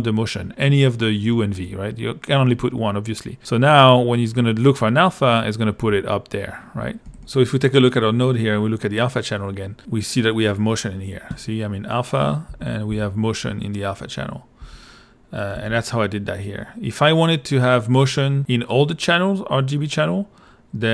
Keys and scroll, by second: 7.1 l, 9.8 a, 12.5 a, 14.6 a, 15.5 l.